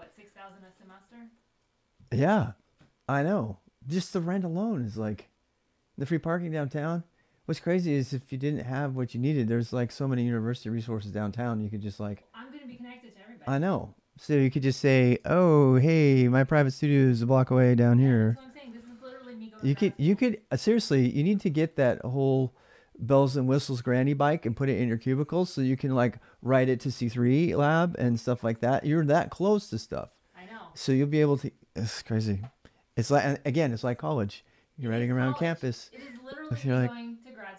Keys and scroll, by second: 0.1-0.9 typing, 14.7-16.3 typing, 17.9-19.1 typing.